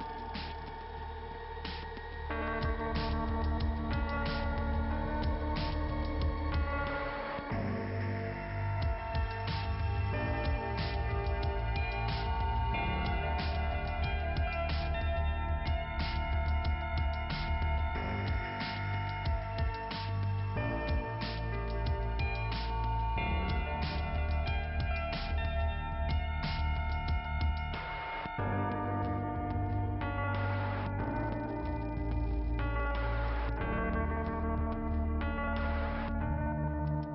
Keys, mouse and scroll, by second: 0.9 click, 7.8 click, 8.3 click, 10.2 click, 11.7 click, 12.5 click, 14.0 scroll down 1, 14.9 click, 16.2 click, 17.3 click, 17.8 click, 19.5 click, 21.5 click, 23.2 click, 24.4 click, 26.2 click, 27.3 click, 28.9 scroll up 2, 31.4 click, 34.3 scroll down 2, 36.4 scroll up 2.